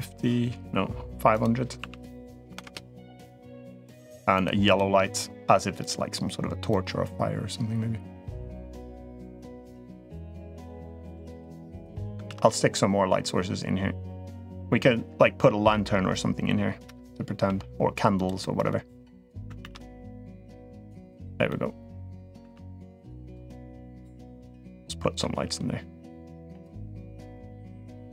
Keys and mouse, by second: 1.2-2.4 drag, 2.3 0, 3.7 click, 4.4 click, 5.6 click, 9.1-9.9 middle drag, 10.3 g, 10.9-11.9 middle drag, 12.1 shift+d, 14.2-15.6 middle drag, 17.2 g, 18.2-19.1 middle drag, 19.4 shift+d, 20.5-21.1 middle drag, 21.2-21.9 middle drag, 22.3 shift+d, 23.3-24.2 drag, 24.4-25.0 drag, 25.2 g, 27.0-28.1 drag.